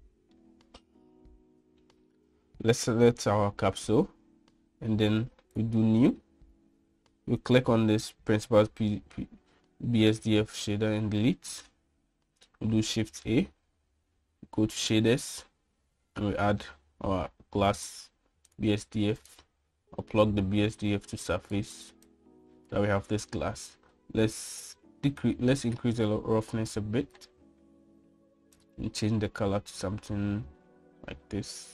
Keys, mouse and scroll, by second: 1.3-3.0 middle drag, 6.5 click, 8.4 click, 11.3 x, 13.9 shift+a, 21.3-22.5 drag, 23.0 click, 26.2-28.1 drag, 29.5 click.